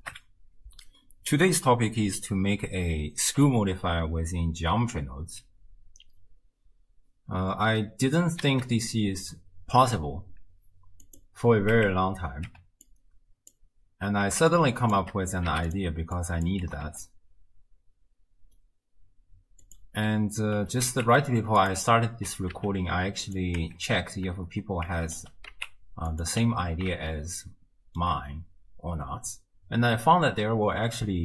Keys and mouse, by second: 0.1 ctrl+alt+shift+q, 8.5 shift+a, 11.8 Tab, 12.9 click, 14.7 shift+click, 15.5 x, 16.3 click, 16.7 g, 20.6 e, 22.3 e, 23.6 Tab, 24.9 Tab, 25.2 e, 26.5 Tab, 27.3 shift+click.